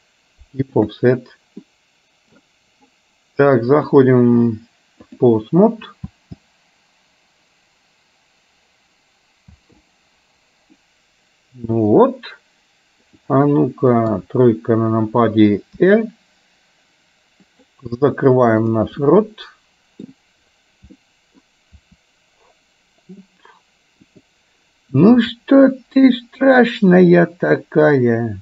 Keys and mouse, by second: 1.7 middle click, 3.8-5.6 drag, 6.2 space, 9.7 space, 10.8-12.0 middle drag, 13.2 click, 14.2 KP_3, 16.0 r, 18.7 click, 19.1-20.1 middle drag, 21.1 middle click, 21.8 r, 25.2 g.